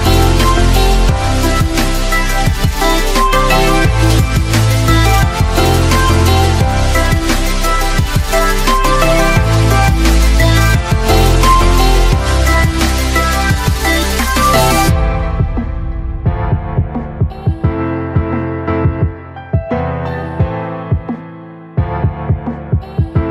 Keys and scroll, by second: 3.5 ctrl+alt+z.